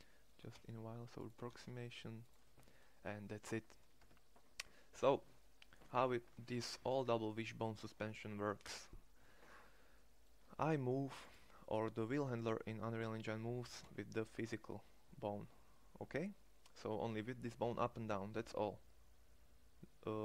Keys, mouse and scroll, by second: 1.0 shift+s, 3.6 Tab, 13.1 g.